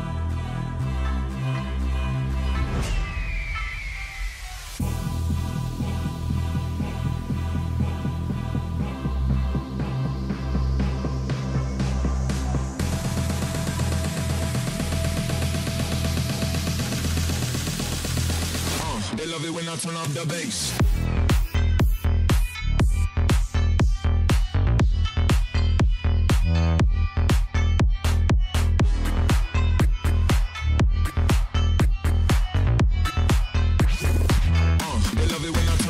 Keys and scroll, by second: 10.0-11.8 typing, 14.3 c, 15.3-16.9 typing, 18.7-20.9 typing, 29.6 1, 31.4-32.2 typing, 33.8-34.6 typing, 35.7-35.8 typing.